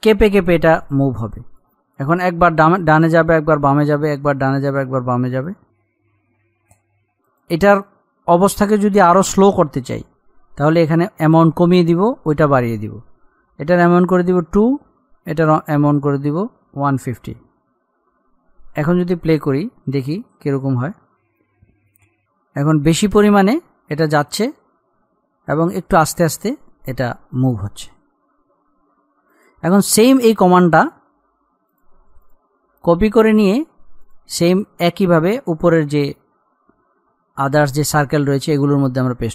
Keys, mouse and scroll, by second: 5.6 click, 7.4 click, 14.5 BackSpace, 15.3 Right, 20.1 click, 29.5 click, 32.4 right click, 33.4 click.